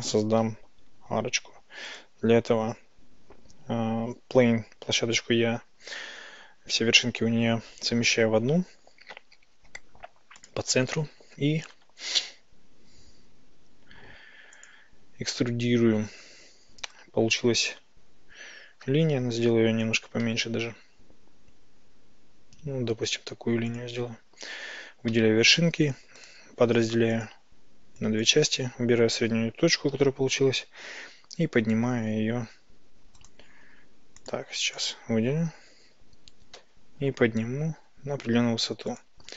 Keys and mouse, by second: 0.5 x, 2.6-11.8 drag, 11.8 e, 14.6 ctrl+click, 18.9 g, 20.3 x, 23.7 ctrl+click, 25.2 a, 28.1 click, 31.9 typing, 34.3 click, 34.8 click, 36.6 g, 37.1 y, 39.0 ctrl+click.